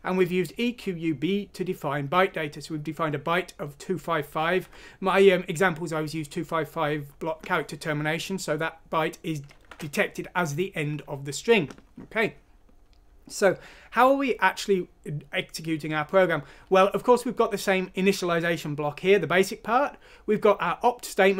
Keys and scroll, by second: 9.7 alt+Tab.